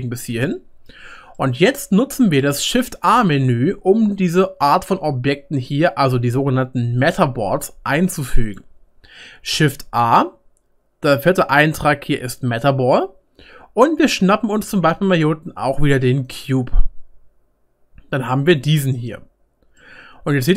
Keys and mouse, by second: 8.2 middle click, 8.5 click, 8.6 middle click, 9.5 shift+a, 12.2-16.4 drag, 16.4-20.5 middle drag.